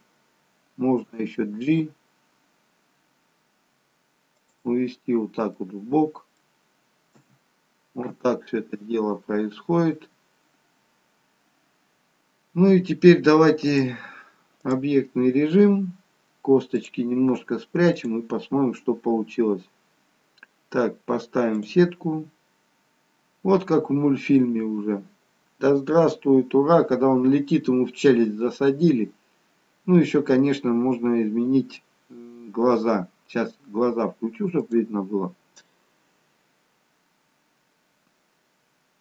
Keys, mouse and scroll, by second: 1.2 g, 5.6 middle click, 7.3 KP_1, 9.3-9.9 scroll down 1, 9.9-10.3 scroll down 4, 13.7 click, 22.4-25.2 scroll up 2, 25.2-26.0 scroll up 2, 36.6 click.